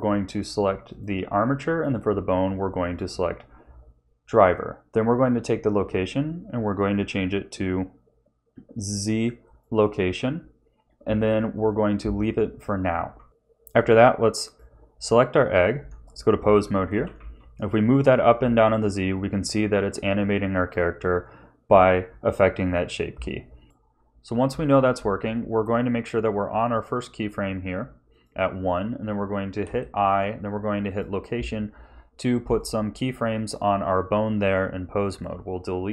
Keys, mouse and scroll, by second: 11.5 click, 13.8 shift+middle click, 13.8 scroll up 1, 14.4 click, 14.9 Tab, 16.9 g, 25.8 click, 28.1 click, 29.6 i, 32.4 click, 33.4 click, 35.0 click.